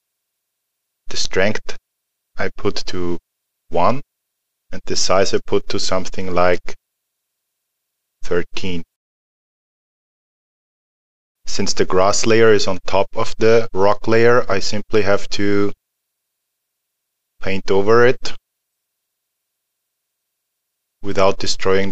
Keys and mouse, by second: 2.9 click, 9.9 alt+middle click, 12.8 alt+middle click, 15.5 click.